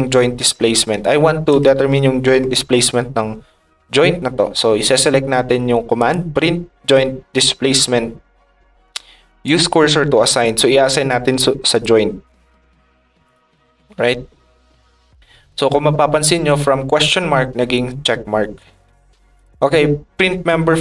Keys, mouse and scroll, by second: 1.0 ctrl+click, 5.9 click, 8.9 ctrl+click, 9.4 click, 10.0 click, 11.7 click, 13.2-14.4 drag, 19.3 click.